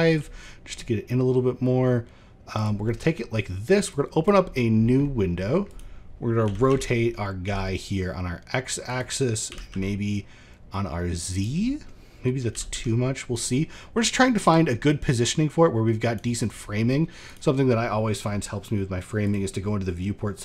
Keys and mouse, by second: 0.0 middle click, 3.4 click, 4.0 middle drag, 4.5 middle drag, 5.2 drag, 6.0 r, 7.0 middle click, 7.4 middle click, 11.2 middle click, 14.7 click, 18.7 click.